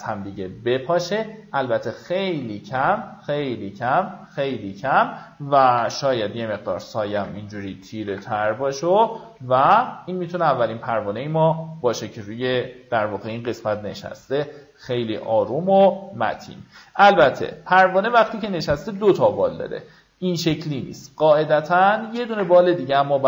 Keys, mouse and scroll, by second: 6.1 KP_6, 9.8 alt+scroll down 1, 10.5-11.0 alt+scroll down 2, 12.4 alt+scroll up 1, 13.2-13.9 alt+scroll up 3, 14.2-15.6 drag, 16.6 alt+scroll up 1, 20.5 alt+click, 21.4 click, 22.6 ctrl+z, 23.0 Escape.